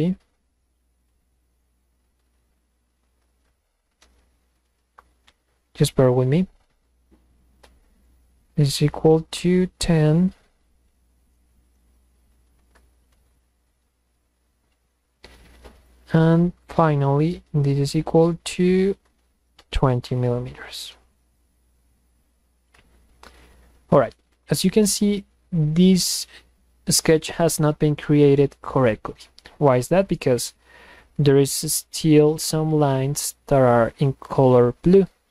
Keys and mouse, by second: 4.1 Return, 6.8 click, 8.6 click, 13.2 Return, 15.8 drag, 17.8 click, 25.4 click, 32.6-35.3 drag.